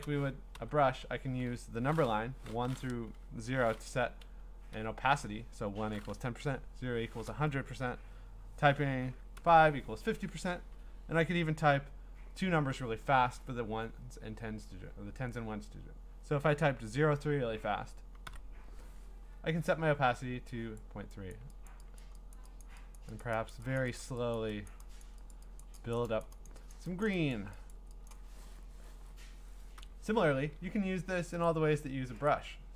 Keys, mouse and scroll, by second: 0.0 5, 0.6 click, 4.7 1, 6.4 0, 9.3 5, 17.9-18.7 typing, 20.8 click, 21.3 click, 21.7 click, 22.0 click, 22.3 click, 22.6 click, 23.0 click, 23.2 click, 23.5 click, 23.8 click, 24.0 click, 24.4 click, 24.7 click, 25.0 click, 25.3 click, 25.6 click, 25.9 click, 26.2 click, 26.5 click, 26.7 click, 27.0 click, 27.3 click, 27.7 click, 28.1 click, 29.8 0, 31.5 click.